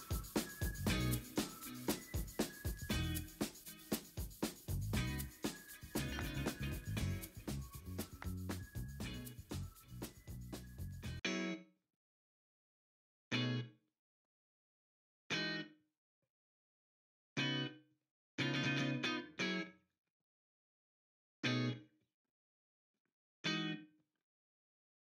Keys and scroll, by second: 3.9 b, 4.7 x, 5.0 ctrl+z, 7.5 ctrl+z, 8.2-9.0 typing, 10.3 v, 10.9 v, 15.6 ctrl+z, 17.1 ctrl+z, 21.3 v, 22.8 ctrl+z, 23.6 v, 23.8 v.